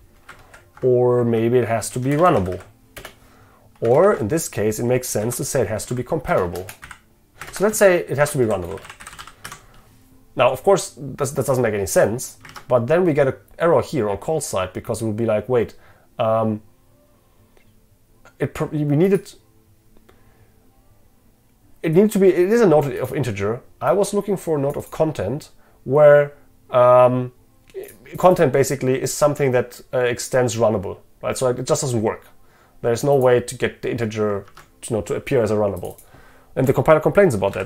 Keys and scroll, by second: 0.5 ctrl+shift+Left, 3.0 Return, 4.0 ctrl+shift+Left, 7.5 ctrl+shift+Left, 9.5 Escape, 12.5 ctrl+Tab, 34.6 ctrl+Tab.